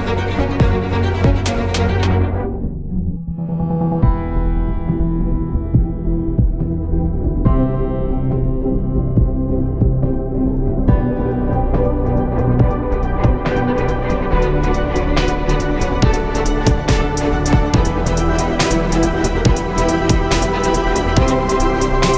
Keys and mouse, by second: 6.1 ctrl+KP_1, 6.9 z, 8.5 shift+a, 9.5 s, 12.5 s, 13.8 KP_3, 15.0 r, 16.4 ctrl+KP_1, 17.5 Tab, 18.2 s.